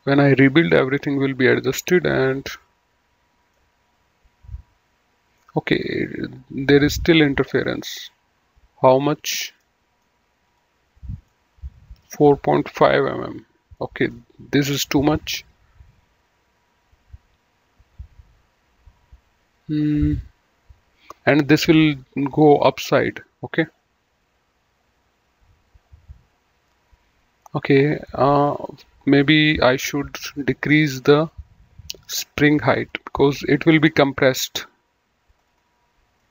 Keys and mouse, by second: 2.1 middle click, 3.5 middle click, 7.4 click, 8.9 click, 9.6 middle click, 10.5 click, 11.3 middle click, 13.8 middle click, 28.1 middle click, 28.5 right click, 29.7 click, 30.9 click, 32.6 click, 35.2 click, 36.2 middle click.